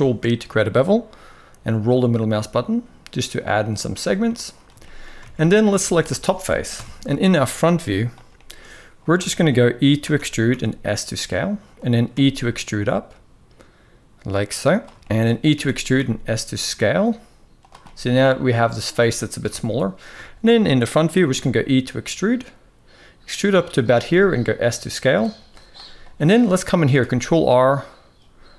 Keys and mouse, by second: 4.0-4.4 middle drag, 4.5 shift+middle click, 4.9 alt+a, 6.5 KP_1, 7.1 shift+middle click, 8.1 shift+middle click, 9.0 shift+middle click, 9.8 e, 11.8 e, 14.7 shift+middle click, 15.2 e, 17.5 middle click, 19.1 KP_1, 19.9 shift+middle drag, 20.9 e, 23.7 s, 26.6 ctrl+r.